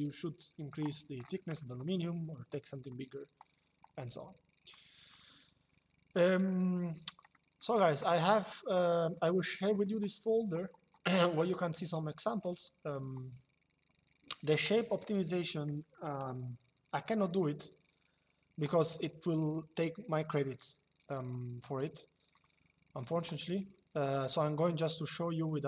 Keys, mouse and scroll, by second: 1.2 middle click, 4.4 click, 5.9 click, 7.0 middle click, 8.9 click, 12.1 click, 15.6 shift+middle click, 16.8 middle click, 22.0 click, 24.9 shift+middle click.